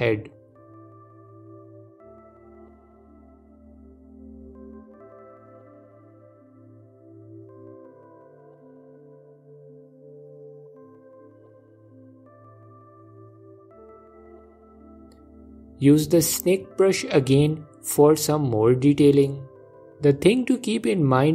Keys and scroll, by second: 19.5 f.